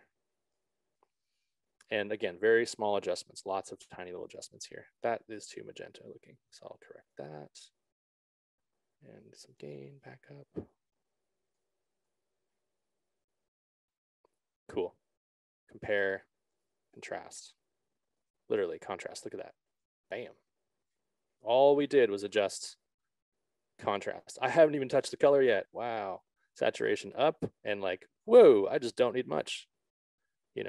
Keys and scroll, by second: 5.7 ctrl+z.